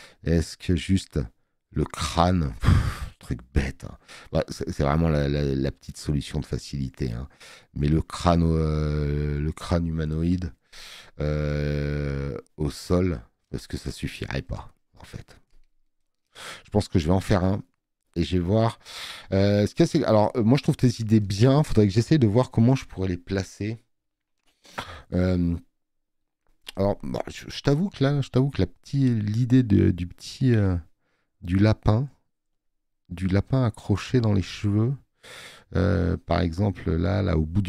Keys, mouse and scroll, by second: 19.4 space, 19.6 click, 26.3 scroll up 1, 27.5 click.